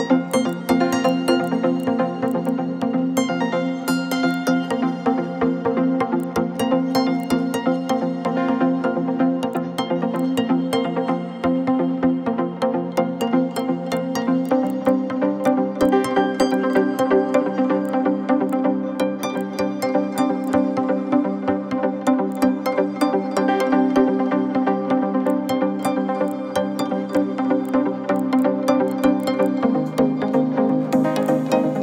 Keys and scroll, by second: 3.2 ctrl+a, 4.0 ctrl+c, 4.9 ctrl+v, 5.6 ctrl+-, 5.6 ctrl+-, 25.8 ctrl+z.